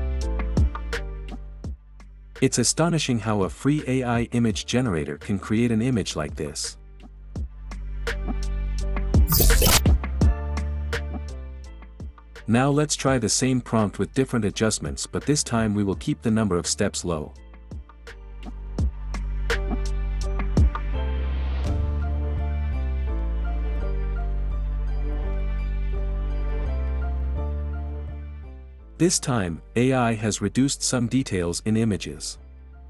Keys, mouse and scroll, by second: 1.8 click, 9.6-10.4 drag, 10.6-11.6 drag, 12.2-13.2 drag, 16.1-17.1 drag, 18.1-19.1 drag, 30.2 click, 32.5 click.